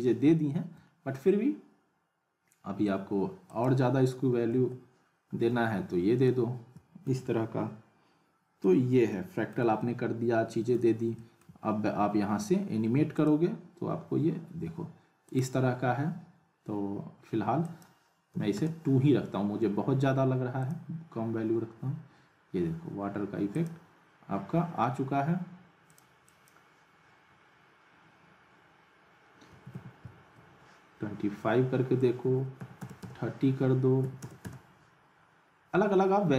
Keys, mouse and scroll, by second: 0.8 middle click, 3.5 click, 6.3-7.2 alt+middle drag, 8.6-9.8 alt+middle click, 9.8-10.7 middle drag, 13.1 click, 15.5 click, 17.6 click, 20.7 click, 23.5 click, 25.9 click.